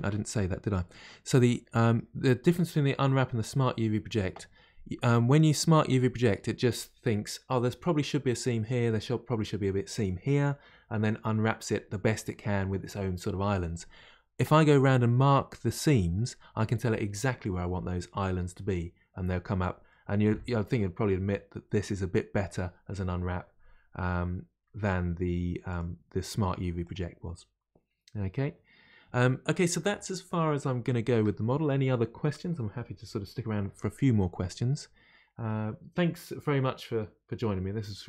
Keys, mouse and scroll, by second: 0.9-1.4 scroll down 1, 29.4-29.9 scroll down 1, 29.9-38.0 middle drag.